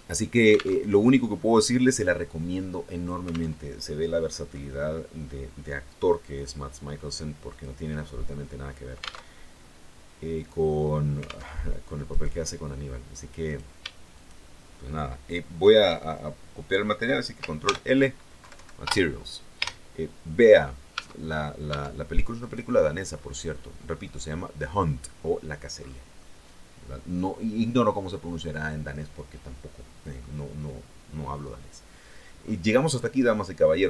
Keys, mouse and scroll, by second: 0.6 alt+Tab, 3.4 alt+Tab, 6.2 click, 7.4 click, 9.1 alt+Tab, 11.4 alt+Tab, 12.0 right click, 13.4 right click, 14.0 shift+right click, 17.5 ctrl+l, 18.3 ctrl+Down, 19.4 Return, 20.8 Tab, 21.6 Tab, 22.3 right click, 23.0-23.9 scroll up 2, 23.9 scroll down 1, 25.6-26.0 scroll down 2, 26.0-30.2 middle drag, 32.3-32.8 scroll down 2, 32.8-33.8 middle drag.